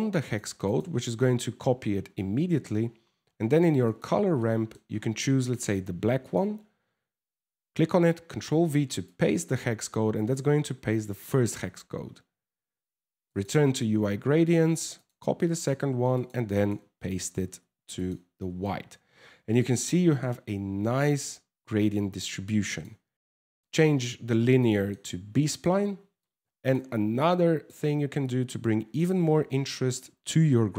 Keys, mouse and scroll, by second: 2.5 scroll up 5, 3.5 click, 4.0 middle click, 4.5 scroll up 2, 5.0 click, 14.6 click, 15.1 click, 15.2 click, 18.2 middle click, 22.3 click, 24.2 middle click, 25.0 middle click, 25.9 click, 26.8 click, 27.9 click, 29.2 scroll down 4, 29.3 middle click.